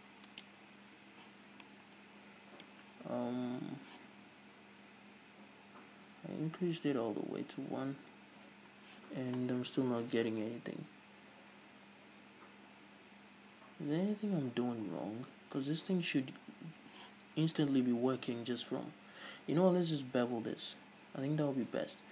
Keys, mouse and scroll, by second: 0.6 right click, 1.5 scroll down 2, 1.8-22.1 middle drag, 4.3 Tab, 21.7 Tab.